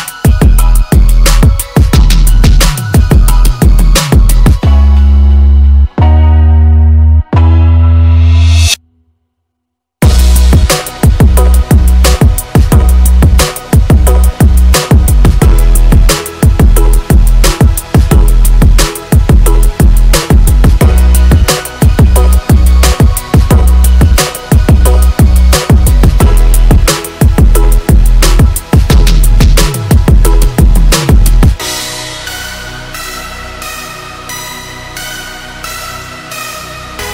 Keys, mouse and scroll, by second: 12.7 middle click, 22.1-23.9 middle drag, 25.1-27.6 middle drag, 28.2 middle click, 32.1-34.7 middle drag.